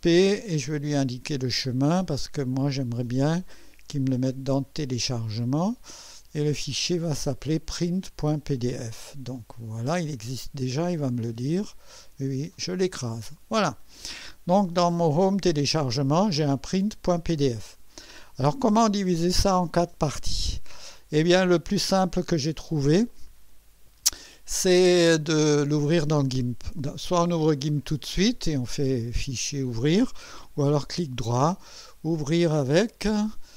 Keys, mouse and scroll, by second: 1.0 click, 5.4 click, 9.4 click, 11.4 click, 12.6 click, 14.9 click, 22.4 right click, 23.2 click, 30.9 right click.